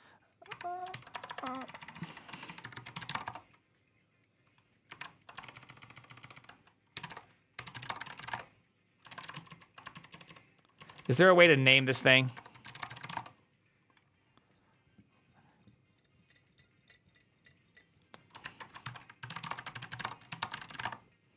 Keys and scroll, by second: 0.4 Up, 0.8 ctrl+w, 0.9-3.4 typing, 1.8 ctrl+Left, 1.9 ctrl+Left, 4.8 Up, 5.2-9.7 typing, 5.9 ctrl+w, 6.0 ctrl+w, 6.2 ctrl+w, 10.0 ctrl+u, 10.1 ctrl+u, 10.8 ctrl+u, 11.0 ctrl+u, 11.3 ctrl+c, 11.4 ctrl+c, 11.6 Up, 11.8-13.4 typing, 18.7 ctrl+alt+t, 18.8-21.2 typing.